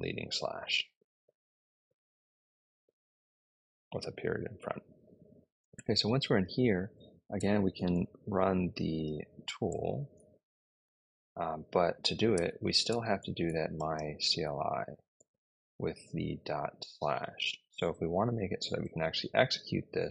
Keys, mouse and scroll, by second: 5.1-6.0 typing, 7.2-9.4 typing, 9.5 Return, 12.0-14.3 typing, 15.0 Return.